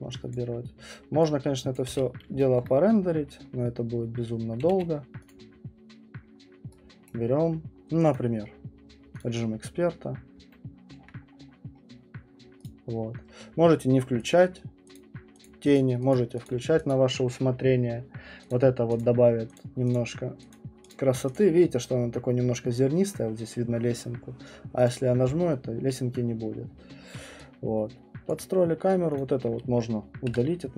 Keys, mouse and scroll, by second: 0.3 click, 1.8 click, 1.9 q, 2.6 alt+middle click, 2.8 middle click, 3.1 middle click, 3.1 middle click, 3.2 middle click, 3.3 alt+middle click, 3.5 middle click, 3.7 middle click, 3.7 alt+middle click, 3.9 middle click, 4.2 middle click, 4.7 q, 5.3 click, 7.1 right click, 8.1 click, 9.2 click, 11.0 alt+middle click, 11.1-11.8 alt+middle click, 11.3 middle click, 11.4 middle click, 11.5 alt+middle click, 11.7 middle click, 12.6 click, 14.3 click, 14.9 click, 15.7 click, 16.2 click, 16.4 click, 16.9 click, 18.5 click, 19.0 click, 19.5 click, 19.9 click, 20.5 click, 20.9 click, 21.3 click, 24.9 click, 28.3 alt+click, 29.1 click, 30.3 Delete.